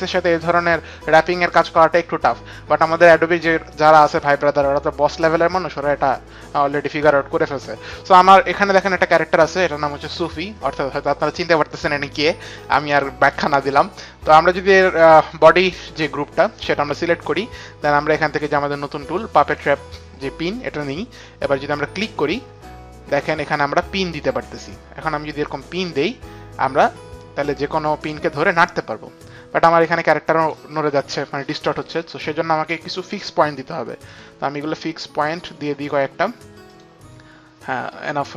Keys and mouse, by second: 15.1 click, 18.8 click, 21.9 click, 23.9 click, 25.7 click, 27.8 click, 31.5 ctrl+z, 31.5 click, 35.1 click, 36.5 click.